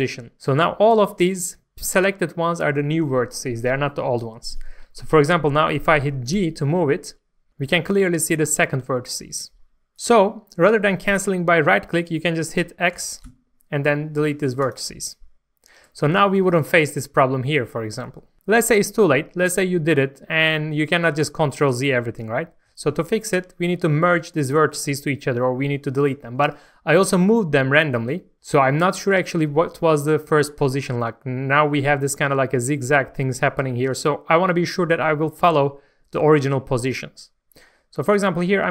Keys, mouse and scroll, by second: 6.4 g, 9.9 click, 13.2 x, 14.6 click, 16.1-16.5 scroll down 1, 16.5 middle click, 17.0-18.3 scroll up 1, 18.3 middle click, 19.8-20.2 scroll up 1, 20.2 scroll down 1, 22.3-22.7 scroll up 1, 22.7 middle click, 23.0 scroll up 1, 23.4 shift+middle click, 23.9 scroll up 1, 24.4 shift+middle click, 28.9-31.2 scroll up 1, 38.1 click.